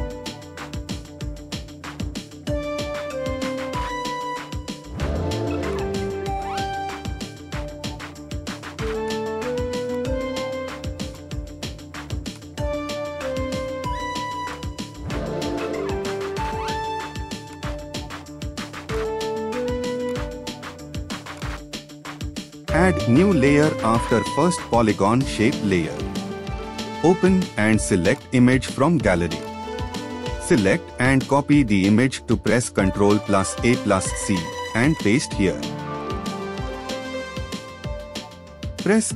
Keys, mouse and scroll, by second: 18.1-20.2 scroll up 1, 26.3 ctrl+o, 26.9 scroll down 1.